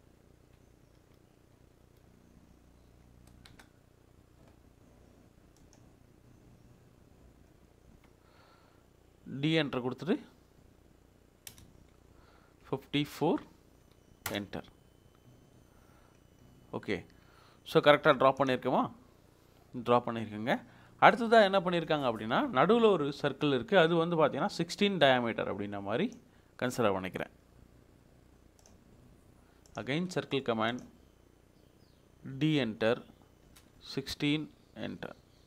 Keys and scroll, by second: 0.9 BackSpace, 1.9 e, 2.0 BackSpace, 3.4 c, 3.4 space, 10.6 d, 11.5 Return, 13.5 5, 14.3 4, 14.3 Return, 32.3 d, 33.5 Return, 34.8 1, 35.4 6.